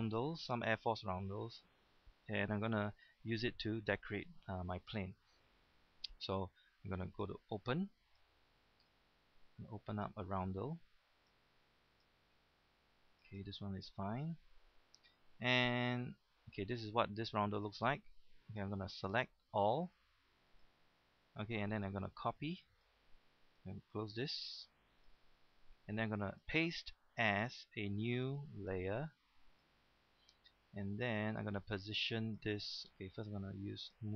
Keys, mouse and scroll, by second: 8.1 click, 16.5 click, 18.2 click, 29.6 click.